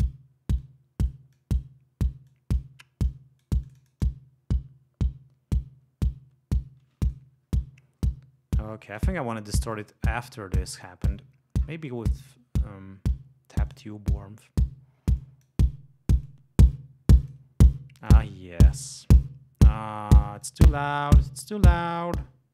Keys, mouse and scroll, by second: 0.6-1.2 drag, 1.3-1.7 drag, 2.2 click, 3.0-3.6 drag, 3.6-7.3 drag, 8.9 click, 9.7 right click, 11.1-11.8 scroll down 2, 13.7 click, 15.2 click, 16.2-17.5 drag, 18.0 click, 18.6 right click, 20.4 click, 22.0-22.4 drag.